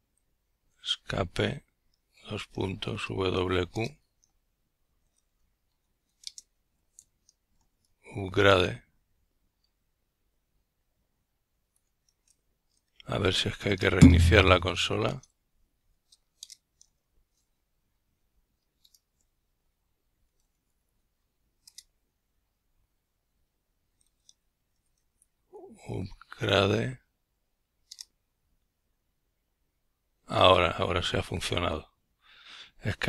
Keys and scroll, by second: 2.5 ctrl+t, 2.6-4.1 typing, 6.1-8.7 typing, 10.2 Return, 22.3-24.9 typing.